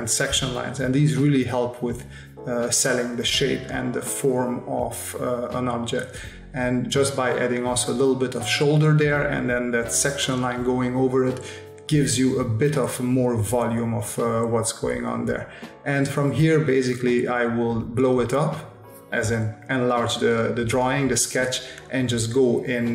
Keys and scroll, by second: 0.0 space, 1.7 s, 3.6 space, 6.0 space, 7.6 space, 8.9 space, 11.2 space, 13.8 space, 15.5 space, 17.5 space, 17.9 v, 21.7 ctrl+alt+KP_0, 21.9 space.